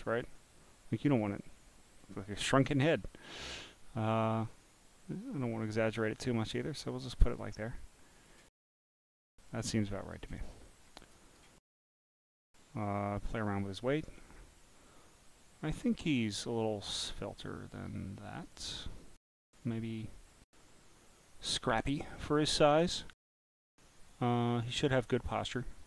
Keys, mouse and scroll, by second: 0.4-7.4 drag, 7.9 click, 8.8-9.2 scroll up 10, 9.7 click, 10.7 scroll down 1, 11.1 click, 13.2-16.9 drag, 18.0 click, 20.6 click, 24.1 click.